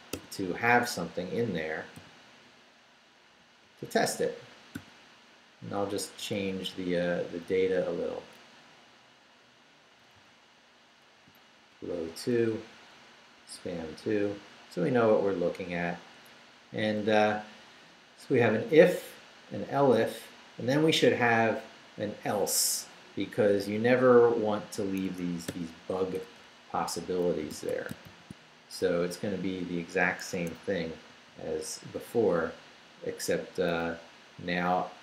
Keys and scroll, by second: 0.1 d, 2.0 u, 2.4 Down, 3.6 Down, 4.7 p, 5.6 Down, 6.8 Right, 10.1 Right, 11.2 i, 11.6 2, 12.1 Down, 12.4 Left, 13.4 2, 14.2 Left, 23.7 Down, 25.0 Escape, 25.5-28.6 typing, 30.3 Escape, 31.1 p, 33.9 Up.